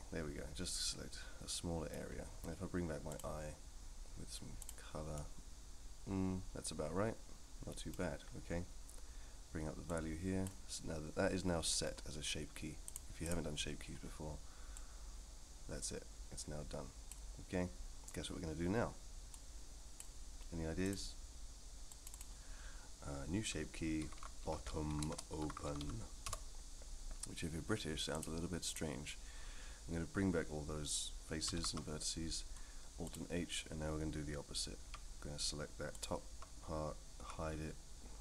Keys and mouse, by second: 3.1 click, 4.6 click, 5.1-7.9 middle drag, 10.0 click, 12.9 click, 14.8 click, 19.4 click, 20.8 click, 21.9 click, 22.1-27.0 drag, 24.6 t, 28.2-28.7 drag, 31.6 alt+h, 34.8 3, 37.2 h.